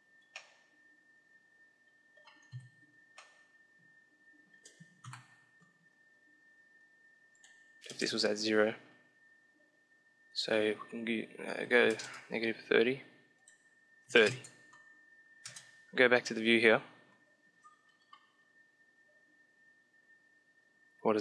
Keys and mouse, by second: 0.0-1.2 middle drag, 1.7 middle click, 2.4 KP_5, 3.1-5.0 middle drag, 5.0 ctrl+KP_7, 5.9-7.2 middle drag, 7.2-9.0 drag, 10.2-11.8 drag, 13.2-14.8 drag, 15.2 KP_0.